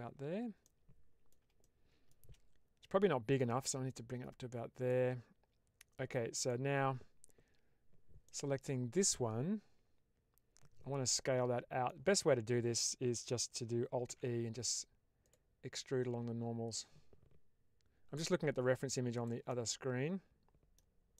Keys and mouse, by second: 0.5 middle click, 1.5 shift+middle click, 3.8 click, 6.3 ctrl+alt+click, 8.1-11.9 middle drag, 14.0 alt+e, 19.0 click, 19.4-20.7 middle drag, 21.0 middle click.